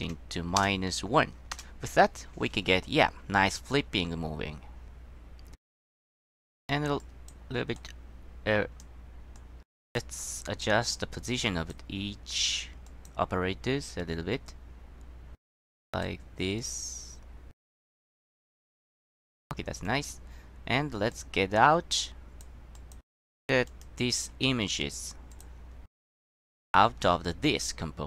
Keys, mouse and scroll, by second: 3.3-3.7 middle drag, 7.9-9.0 drag, 9.5-10.1 drag, 11.0-11.9 drag, 13.0 click, 15.7-16.2 drag, 16.7-17.8 drag, 18.2 click, 18.8 click, 20.0 click, 21.2-22.6 drag, 22.9 click, 23.8 click, 25.4 click, 26.4 click, 27.4-27.9 scroll down 2.